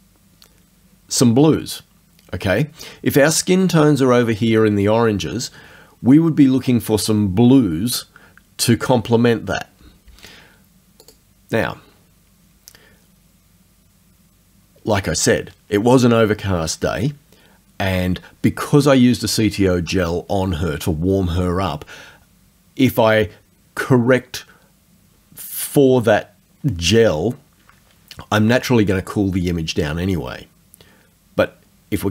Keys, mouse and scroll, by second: 11.0 click.